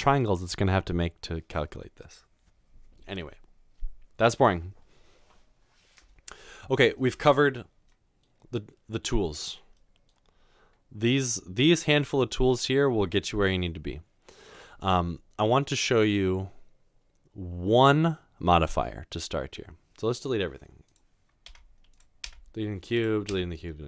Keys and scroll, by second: 21.5 Delete, 22.3 Delete, 23.3 Delete.